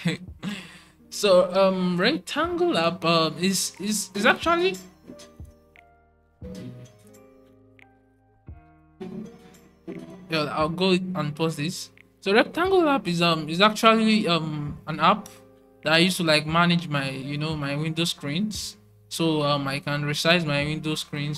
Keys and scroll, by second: 8.3 typing.